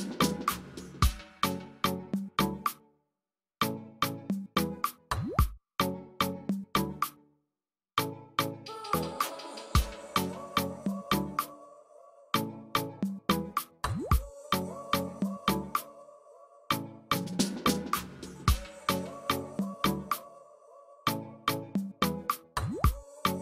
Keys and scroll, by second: 0.1 space, 1.2 ctrl+space, 11.2 F9, 11.3 space, 21.7 ctrl+alt+z.